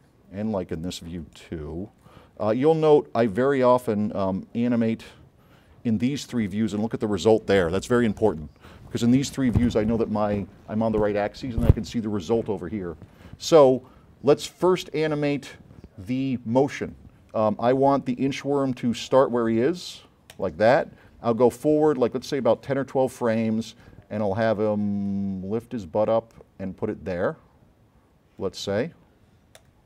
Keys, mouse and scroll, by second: 0.1-0.6 scroll down 2, 1.3-2.2 drag, 2.5-5.4 drag, 20.4 click, 21.1 middle click, 22.0-23.5 drag, 24.7-25.5 drag, 28.5 click, 29.6 click.